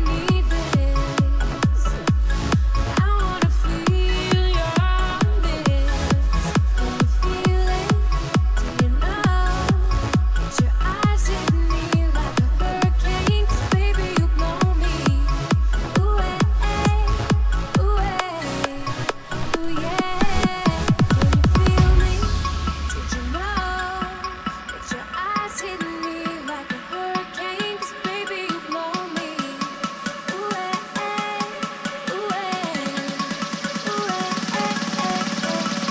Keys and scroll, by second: 21.7 ctrl+m.